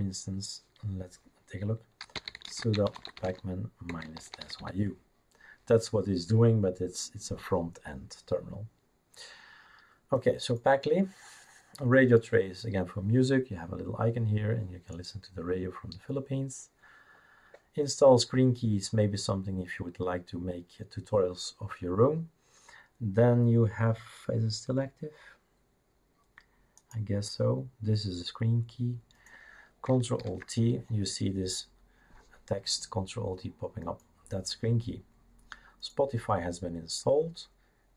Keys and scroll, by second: 1.8-5.2 typing, 30.2 ctrl+alt+t.